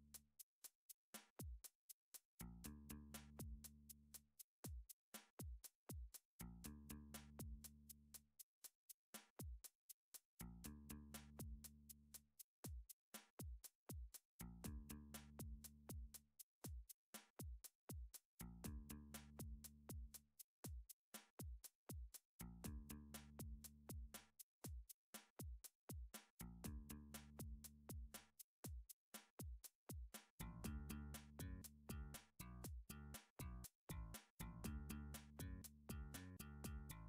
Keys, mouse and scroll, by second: 0.2 scroll down 4, 0.8 scroll up 1, 3.0 middle click, 4.1 3, 4.1 scroll, 7.0 click, 9.1 click, 10.8 click, 12.5 middle click, 13.2 h, 14.6 middle click, 15.2 click, 16.6 click, 17.7 click, 19.2 middle click, 20.7 g, 21.6 z, 23.4 click, 25.2 alt+h, 27.7 middle click, 29.8 c, 30.4 right click, 30.8 click, 31.1 c, 34.2 click, 34.9 3, 36.0 right click, 36.9 3.